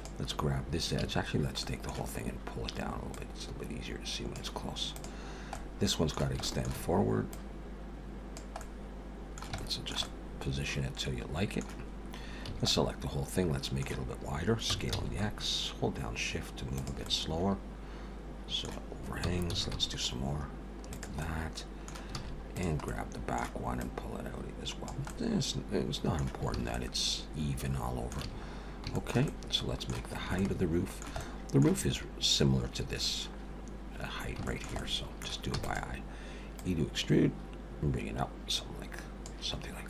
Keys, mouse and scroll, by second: 0.0 click, 1.0 a, 1.6 middle click, 3.1 click, 5.0 click, 5.5 middle click, 6.4 shift+middle click, 7.3 click, 8.6 middle click, 9.6 shift+middle click, 10.0 middle click, 12.5 a, 12.7 middle click, 14.7 s, 17.1 middle click, 19.2 s, 21.2 middle click, 22.2 alt+a, 22.5 click, 22.9 middle click, 23.8 click, 25.1 middle click, 26.6 alt+a, 26.7 middle click, 28.2 a, 28.5-28.8 scroll down 3, 28.9 shift+middle click, 29.3 middle click, 30.1 scroll up 2, 30.4 shift+middle click, 31.2 middle click, 34.5 shift+middle click, 35.5 e, 36.6 click, 39.7-39.8 scroll down 5.